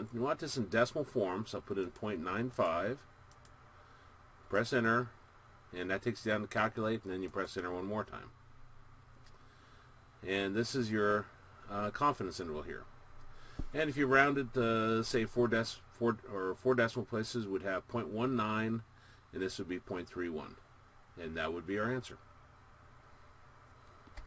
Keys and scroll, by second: 2.1 ., 2.8 9, 3.6 5, 4.7 Return, 7.4 Return.